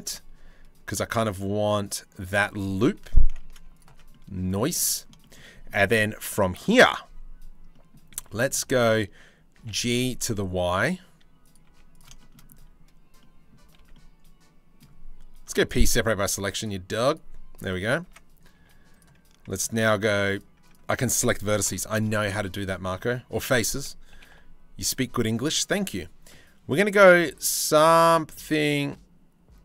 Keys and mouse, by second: 2.6 3, 3.3 click, 3.7 middle click, 4.4 middle click, 5.0 middle click, 7.3 click, 7.8 z, 8.3 click, 9.2 g, 11.3 z, 11.7 shift+middle click, 12.8 click, 13.4 ctrl+z, 13.5 click, 15.0 p, 15.8 Tab, 16.2 click, 16.7 click, 17.7 Tab, 18.6 3, 19.2 click, 20.3 click, 21.3 ctrl+l, 21.9 click, 22.2 middle click, 23.7 g, 25.3 e.